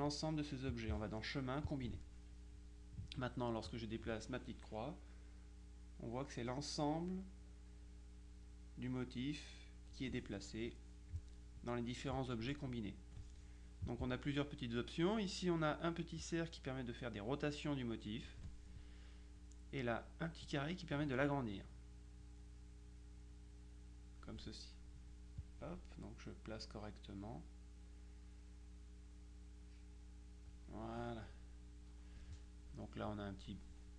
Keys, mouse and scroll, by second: 0.8 click, 1.7 click, 3.8-10.5 drag, 16.3-18.9 drag, 20.6-24.8 drag, 25.5-31.1 drag.